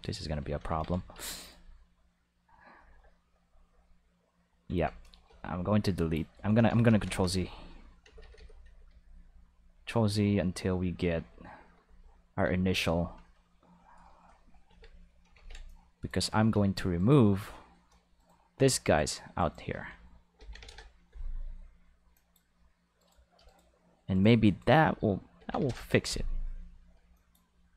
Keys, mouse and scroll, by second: 0.2 Tab, 1.1 Escape, 1.3 right click, 3.2-4.6 middle drag, 4.6 alt+a, 5.2 b, 5.9 click, 6.3 right click, 6.7 ctrl+z, 6.8 ctrl+z, 7.0 ctrl+z, 7.2 ctrl+z, 7.3 ctrl+z, 7.5 ctrl+z, 8.2 ctrl+z, 8.3 ctrl+z, 8.6 ctrl+z, 8.8 ctrl+z, 9.1 ctrl+z, 9.3 ctrl+z, 9.6 ctrl+z, 9.8 ctrl+z, 10.0 ctrl+z, 10.3 ctrl+z, 10.7 ctrl+z, 10.9 ctrl+z, 11.1 ctrl+z, 11.5 ctrl+z, 11.7 ctrl+z, 11.9 ctrl+z, 12.4 ctrl+z, 12.8 ctrl+z, 13.7-14.6 middle drag, 14.6 alt+a, 14.9 middle click, 15.3 ctrl+s, 15.6 click, 16.5 Tab, 16.9 right click, 18.1 shift+right click, 18.9 shift+right click, 20.3 ctrl+l, 20.6 x, 20.6 Return, 22.1 click, 22.9 right click, 23.4 shift+right click, 24.1 shift+right click, 24.4 shift+right click, 25.3 ctrl+l, 25.5 x, 27.1 click.